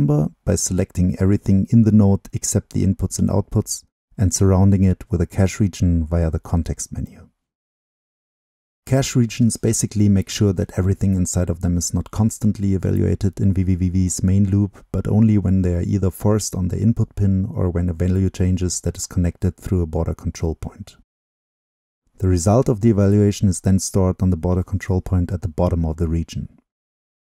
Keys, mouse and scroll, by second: 0.0-3.7 drag, 3.7-5.9 right drag, 5.9 click, 6.4 click, 9.2-10.2 drag, 10.2-11.1 scroll up 2, 11.1-12.3 drag, 12.3-13.1 scroll up 2, 13.1-15.9 drag, 15.9 middle click, 17.9-23.4 right drag, 23.4-23.8 scroll down 2, 23.8-25.9 drag, 25.9-27.2 middle drag.